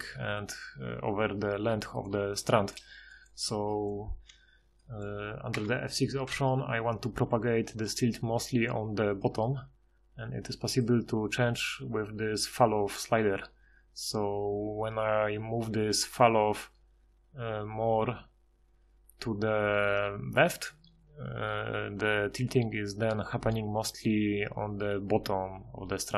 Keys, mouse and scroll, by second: 5.5 F6.